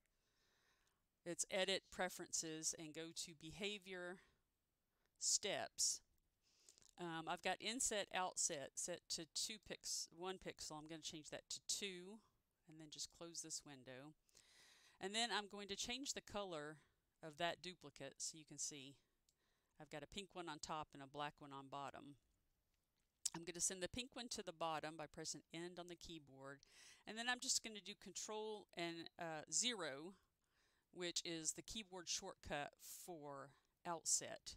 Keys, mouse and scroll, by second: 3.2 click, 7.3 click, 9.4 click, 11.0 2, 13.1 click, 17.5 click, 21.7 ctrl+z, 25.4 End, 29.7 ctrl+o, 33.6 ctrl+o.